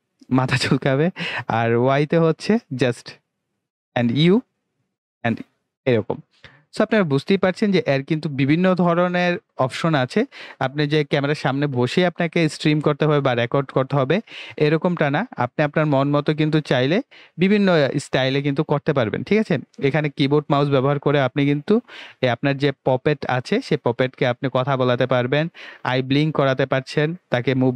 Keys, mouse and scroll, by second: 1.9 y, 4.2 u.